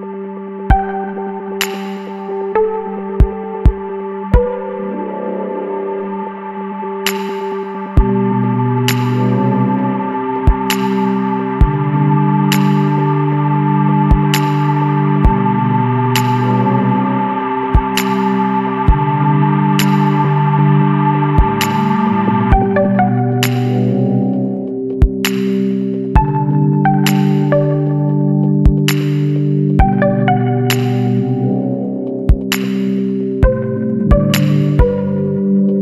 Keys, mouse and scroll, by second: 2.2 click, 3.3 KP_Subtract, 3.6 KP_2, 3.9 KP_Enter, 4.8 scroll up 2, 5.5-7.9 drag, 10.4 click, 12.1 click, 13.2 click, 14.7 KP_1, 15.1 KP_3, 16.4 KP_Enter, 18.5 click, 19.7 KP_Subtract, 20.1 KP_7, 20.9 KP_Enter, 23.1 click, 24.9 click, 26.2 KP_3, 26.4 KP_1, 26.9 KP_Enter, 28.2-28.6 scroll down 1, 29.3-29.6 scroll down 1, 29.7-30.9 scroll up 6, 33.1 click, 34.4 click.